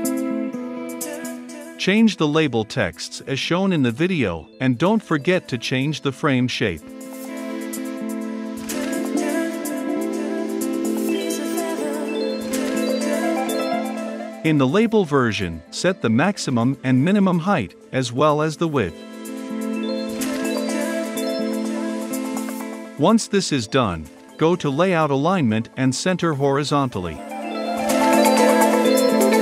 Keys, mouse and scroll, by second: 1.6-4.4 typing, 3.5 click, 4.6-6.0 drag, 6.0-9.3 scroll up 2, 9.3 click, 9.4-9.7 scroll up 2, 9.7 click, 10.5 click, 11.5-13.3 drag, 13.5-14.7 typing, 13.6 click, 16.0-23.7 drag, 23.7-26.6 right drag, 26.6-29.4 drag.